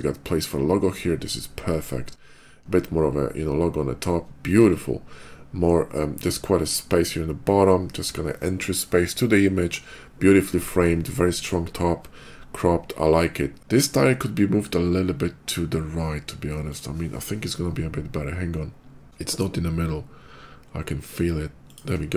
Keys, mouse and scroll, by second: 6.0 middle click, 6.5 middle click, 16.5 click, 18.8 click, 19.0 shift+g, 21.5 shift+click.